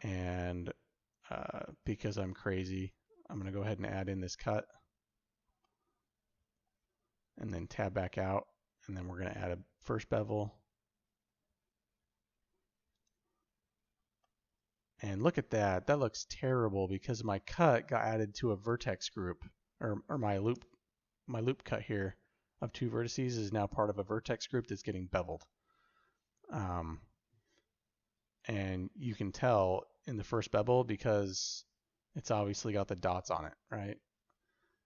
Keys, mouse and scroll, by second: 2.2 ctrl+r, 5.5 middle click, 7.4 Tab, 14.1-20.7 middle drag, 20.4 Tab, 23.2 Tab.